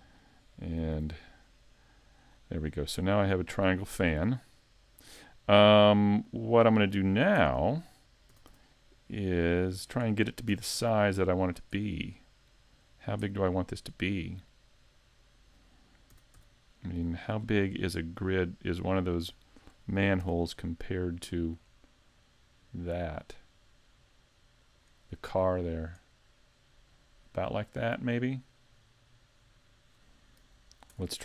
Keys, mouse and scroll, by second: 0.1 click, 1.0 alt+m, 2.7-3.3 scroll down 2, 5.6 middle click, 6.1 scroll down 1, 7.4 Tab, 8.3 s, 9.9 click, 10.5 s, 11.5 click, 11.8 middle click, 12.9-13.3 scroll down 2, 13.3 middle click, 16.1 s, 17.4 click, 17.6-18.0 scroll down 4, 18.0 middle click, 19.4 shift+middle click, 20.2 s, 24.8 click, 25.6 scroll up 2, 26.1 middle click, 28.8 scroll up 2, 29.4 middle click.